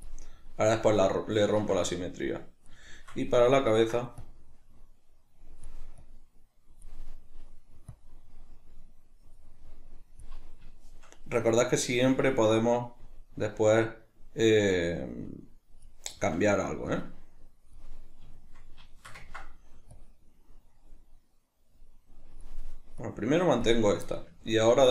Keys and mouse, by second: 0.4-4.2 middle drag, 4.2-7.1 drag, 7.1-7.9 middle drag, 7.9-10.4 drag, 10.4-11.9 middle drag, 11.9-16.2 drag, 16.2-16.9 middle drag, 16.9-18.4 drag, 18.4-20.0 shift+middle drag, 20.0-24.1 drag, 24.1-24.9 middle drag.